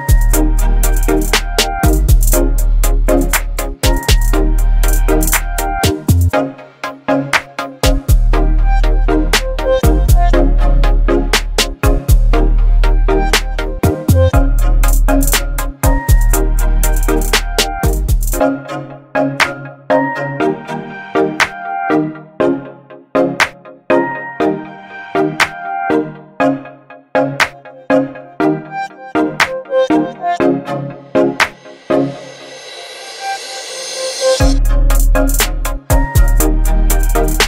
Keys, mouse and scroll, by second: 6.9 BackSpace, 9.0 ctrl+d, 10.9 click, 17.3 click, 20.4-24.1 shift+drag, 24.7 ctrl+t, 26.4-28.9 alt+drag, 29.3 Return, 30.7-31.9 shift+drag, 32.5 ctrl+t, 34.3-35.5 alt+drag, 37.0 Right.